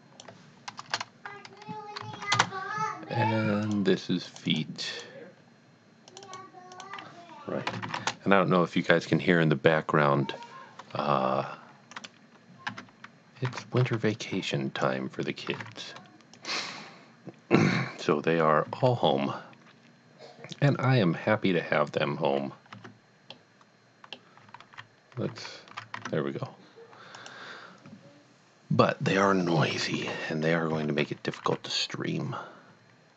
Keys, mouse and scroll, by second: 0.8 BackSpace, 2.1 shift+l, 3.6 Return, 3.6 click, 4.3 click, 4.4 double click, 4.9 click, 6.1 click, 6.7 click, 7.8 shift+r, 8.0 Return, 11.9 click, 12.7 Tab, 13.6 a, 13.9 b, 14.3 click, 15.5 g, 15.8 z, 16.4 click, 18.6 s, 20.5 click, 23.3 middle click, 24.6 ctrl+z, 25.3 ctrl+z, 26.0 Tab, 27.2 click, 29.7 Tab, 30.1 KP_7, 30.8 z, 31.6 z.